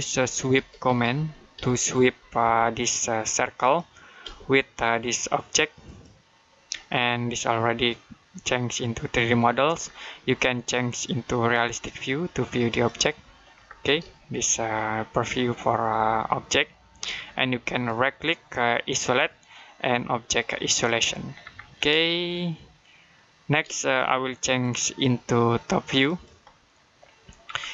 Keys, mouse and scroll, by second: 0.0-2.3 typing, 3.4 click, 4.1 space, 5.7 click, 10.7 click, 13.5-13.8 scroll down 1, 14.0 shift+middle click, 17.7 right click, 18.7 click, 21.2-21.8 scroll down 1, 21.9 shift+middle click, 24.4 click, 27.3-27.7 scroll down 1.